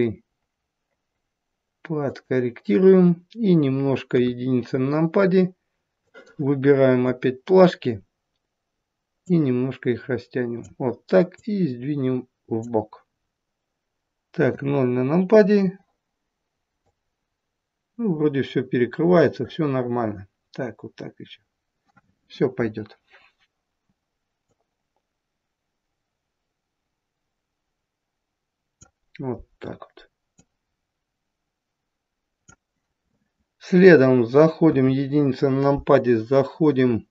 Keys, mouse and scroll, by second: 4.1 KP_1, 6.0 click, 9.1 click, 11.3 click, 14.4 KP_0, 16.8 click, 24.4 click, 30.3 click, 34.7 KP_1.